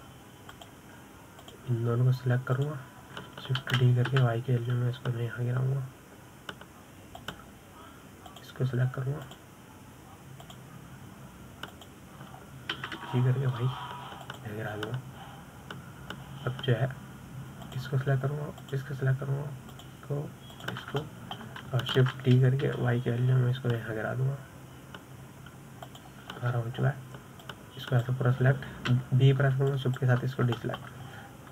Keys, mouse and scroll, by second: 2.9 click, 4.0 shift+click, 5.2 shift+d, 9.7 click, 10.7 shift+click, 11.9 shift+click, 13.2 shift+click, 14.2 g, 19.1 click, 20.1 shift+drag, 21.2 shift+drag, 22.0 shift+click, 22.5-23.5 shift+middle drag, 23.5 shift+d, 27.8-28.9 scroll down 6, 28.9 click, 30.3 b.